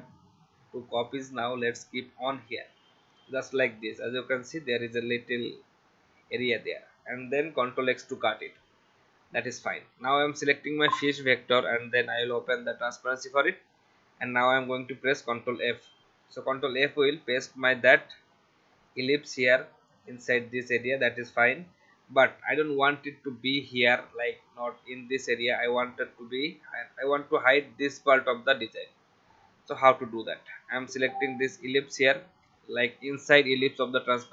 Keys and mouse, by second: 7.7 ctrl+x, 8.2 click, 10.4 click, 12.1 click, 15.6 ctrl+f, 20.9 click, 31.4 click.